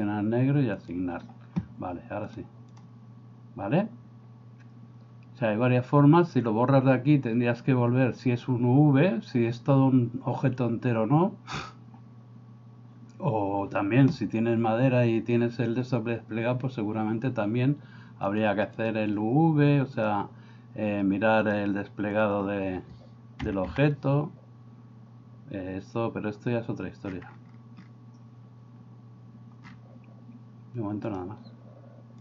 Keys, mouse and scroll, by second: 0.7 click, 2.3 click, 18.7-20.1 drag, 21.5-22.2 drag, 23.5 a, 23.7 a.